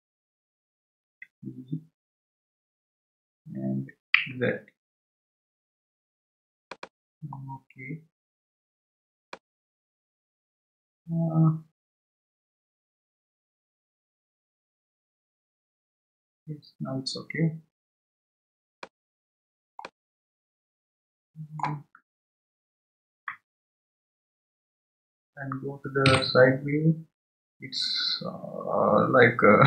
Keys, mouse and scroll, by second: 2.0 e, 7.4-8.5 scroll down 4, 8.5 scroll down 2, 9.3-12.3 middle drag, 19.2 scroll down 2, 19.8-22.0 middle drag, 22.0-22.6 scroll down 2, 24.3 Tab.